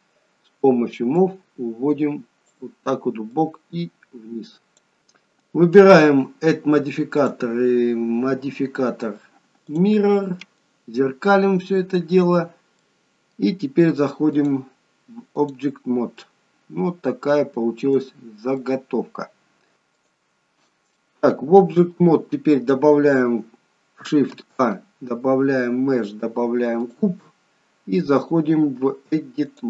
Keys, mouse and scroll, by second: 1.2 click, 5.0 click, 7.1 click, 12.7 middle click, 14.3 click, 16.2 middle click, 18.1-19.2 scroll up 2, 18.5 middle click, 19.7 ctrl+z, 19.7 click, 20.9 middle click, 24.3 shift+a, 28.1 click.